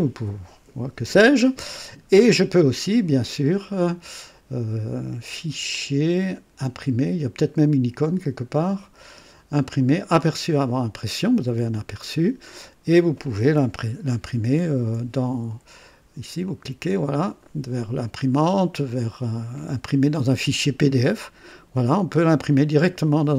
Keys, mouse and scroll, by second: 5.7 click, 10.2 click, 14.4 ctrl+p, 16.4 click, 18.3 click.